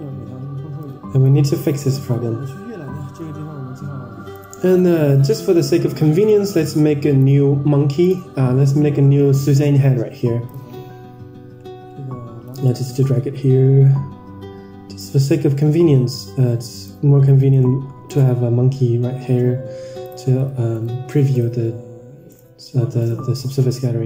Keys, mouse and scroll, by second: 0.7 click, 1.6 middle click, 2.5 KP_0, 4.3 click, 6.4 click, 8.1 click, 8.5 shift+a, 11.5-12.3 scroll down 16, 12.3 g, 15.1-15.5 scroll up 3, 16.0-16.7 scroll up 5, 16.0 s, 17.1 g, 18.4 r, 20.6 right click, 22.2 drag, 22.9 click, 23.6 click.